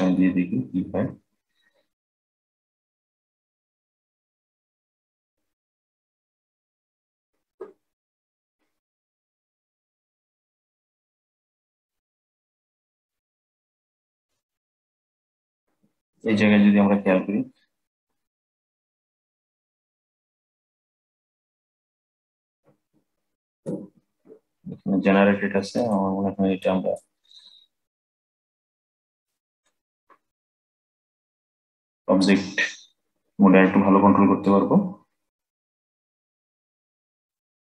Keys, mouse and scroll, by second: 2.1-5.2 drag, 8.2-11.2 drag, 14.6-16.3 middle drag, 16.3-16.9 scroll up 1, 16.9-17.5 scroll up 4, 17.5-18.8 scroll down 1, 18.8-21.8 middle drag, 22.0-25.0 middle drag, 25.5 click, 26.3-30.8 drag, 37.0-37.6 middle drag.